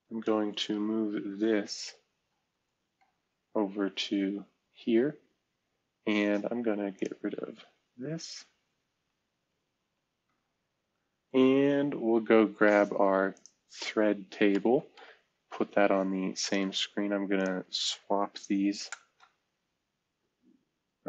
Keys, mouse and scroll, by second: 2.2 ctrl+shift+super+$, 2.9 super+4, 10.2 ctrl+shift+super+$, 11.7 super+3, 13.3 click, 14.5 ctrl+super+$, 14.9 super+4, 16.3-18.0 drag, 18.9 shift+super+Return.